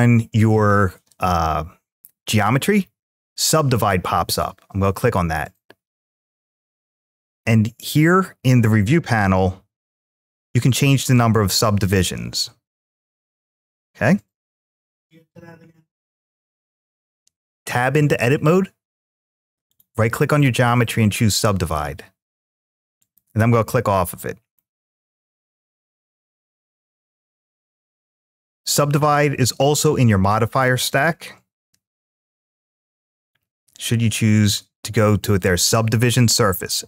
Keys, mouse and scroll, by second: 9.9-13.5 drag, 19.5-21.1 right drag, 22.8 click, 24.3-27.2 middle drag, 28.8 click, 30.2-36.8 drag.